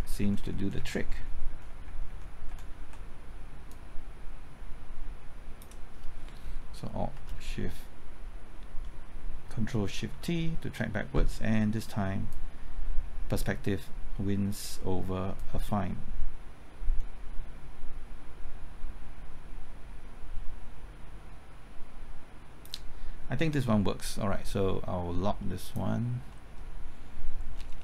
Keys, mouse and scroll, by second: 3.7-6.1 drag, 10.1 ctrl+shift+t, 12.3-15.1 drag, 15.1-23.1 drag, 26.3 middle click, 27.5-27.8 scroll down 1.